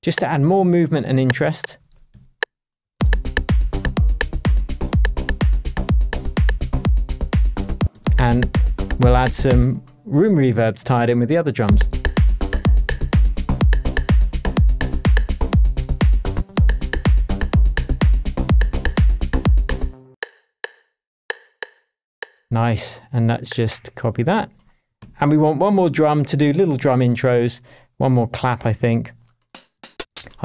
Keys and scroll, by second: 3.5 shift+Tab, 7.8 space, 9.5 space, 11.6 space, 16.3 space, 19.9 space, 25.0 super+d, 25.5 shift+super+Tab, 26.1 shift+Tab, 29.7 Up.